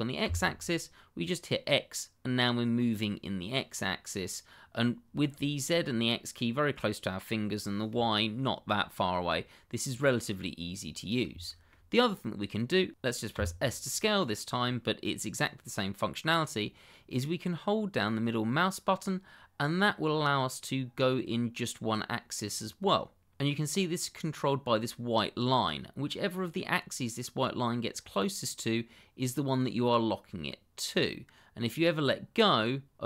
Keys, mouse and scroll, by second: 0.2 x, 9.9 click, 10.4 middle click, 11.6 shift+middle click, 11.9 middle click, 13.3 s, 18.5 middle click, 32.6 middle click.